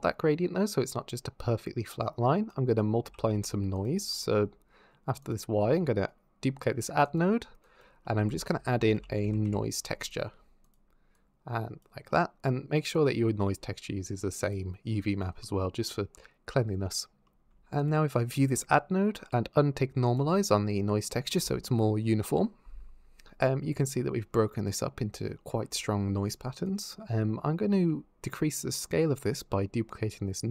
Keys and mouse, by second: 2.3 click, 2.8 g, 3.1 x, 3.6 click, 3.9 click, 5.0 click, 5.4 shift+d, 6.9 click, 7.5 click, 7.9 click, 8.1 shift+a, 10.5 drag, 12.8 click, 17.6 ctrl+shift+click, 19.9 click, 27.5 shift+d.